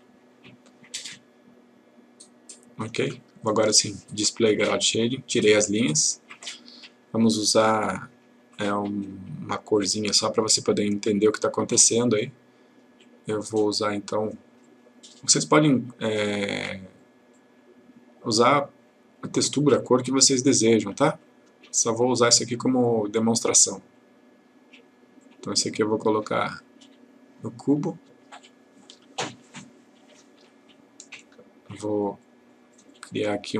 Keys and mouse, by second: 9.8 click, 14.7 click, 20.7-21.6 click, 28.4-29.0 ctrl+click, 29.5-30.4 ctrl+click, 32.1 click.